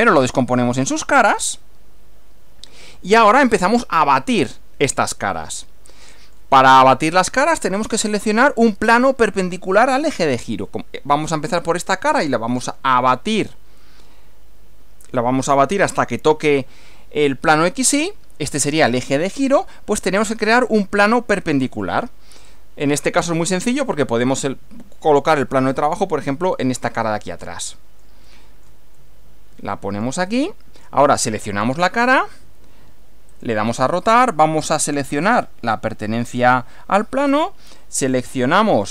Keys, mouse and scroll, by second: 1.4 click, 3.3-4.0 shift+middle drag, 4.1-6.5 shift+middle drag, 22.4-23.8 middle drag, 24.3 click, 26.5 click, 27.4 middle click, 28.3 middle click, 28.9-30.2 middle drag, 30.3 shift+middle click, 31.5 click, 33.3 click, 35.3 click.